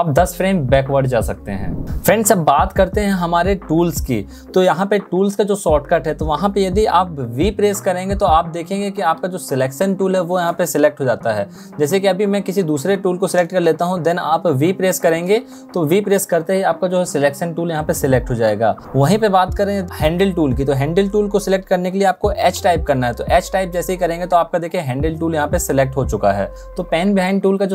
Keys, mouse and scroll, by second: 7.3 v, 14.5 v, 22.3 h.